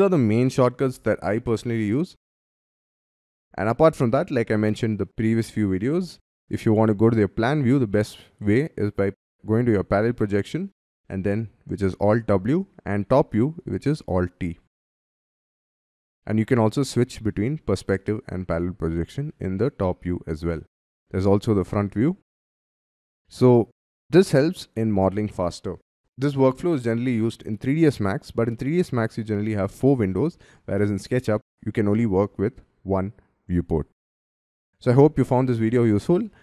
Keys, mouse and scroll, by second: 10.0 alt+w, 13.6 alt+t, 14.5-15.3 scroll down 6, 15.3-15.7 scroll up 4, 15.7 scroll down 3, 16.8 alt+w, 17.9 alt+w, 18.6-19.8 scroll down 5, 20.0 alt+t, 20.7 alt+f, 21.9-22.5 scroll up 3, 22.5 middle click, 23.2 middle click, 23.9-26.0 scroll down 5.